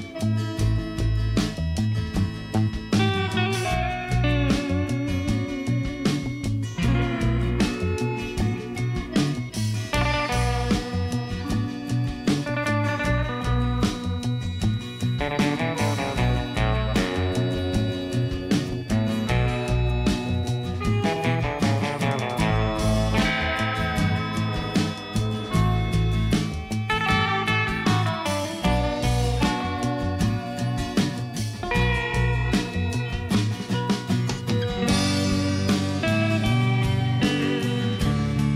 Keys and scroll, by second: 2.9 g, 3.6 z, 6.0 1, 8.0 Tab, 17.1 1, 17.2 8, 17.5 0, 17.8 Return, 25.5 g, 25.7 z, 28.3 e, 28.9 Escape, 29.5 s, 30.1 e, 31.7 i, 32.7 e, 35.4 e, 35.9 s, 36.9 e.